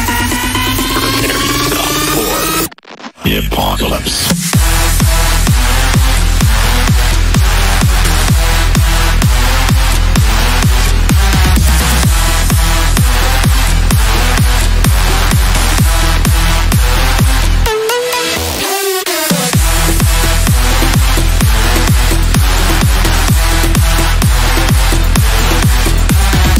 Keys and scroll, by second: 2.6 Delete, 5.6 ctrl+z, 15.5 ctrl+z.